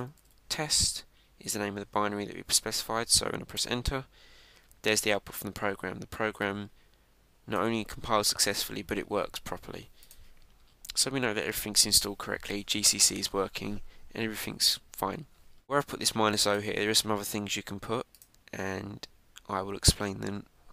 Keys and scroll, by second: 4.5 Return.